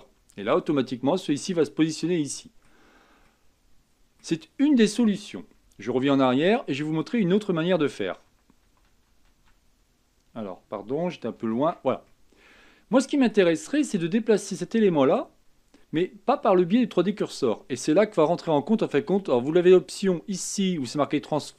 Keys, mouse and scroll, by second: 1.1-1.5 scroll down 1, 1.5-6.1 middle drag, 6.1 ctrl+z, 7.4 ctrl+z, 7.9 ctrl+z, 8.2 ctrl+z, 8.6 ctrl+z, 9.0 ctrl+z, 11.3 ctrl+shift+z, 12.0-15.2 middle drag, 19.6-21.5 drag.